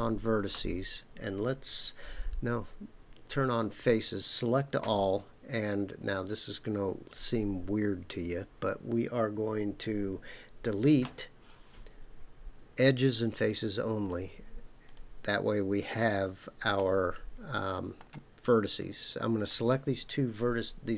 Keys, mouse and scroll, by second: 3.6 click, 4.8 a, 11.0 Delete, 14.8 click, 16.8-18.0 middle drag, 18.8 click.